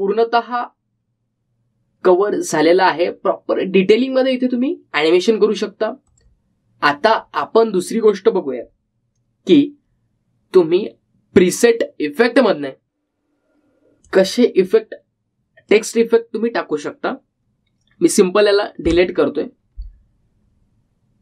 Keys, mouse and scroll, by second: 0.1-1.1 scroll up 1, 7.2 click, 15.2-19.2 drag.